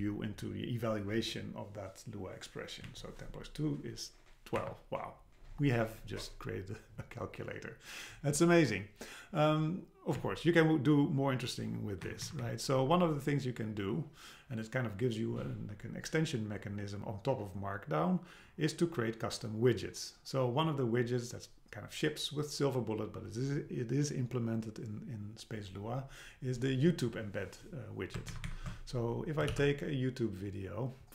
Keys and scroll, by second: 2.9 Down, 4.6 Up, 10.2 Down, 12.1 Right, 12.8 Left, 28.3 alt+super+Left, 29.5 super+c.